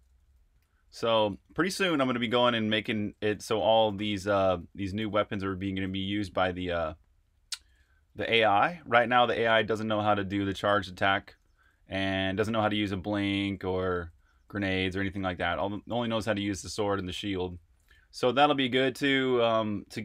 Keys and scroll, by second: 0.0-13.2 typing, 15.2-16.0 typing, 17.4-20.0 typing.